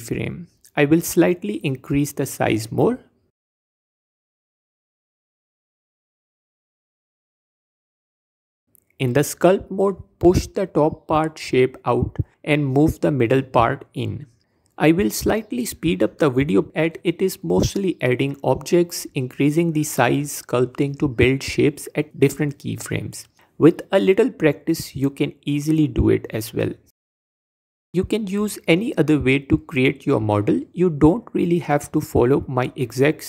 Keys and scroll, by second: 2.3 Tab, 2.9 Tab, 3.8 s, 7.9 Tab, 9.2 f, 15.1 Tab, 15.4 Tab, 17.1 Tab, 19.4 shift+a, 21.4 s, 22.9 s, 24.7 Tab, 31.1 Tab, 31.7 a.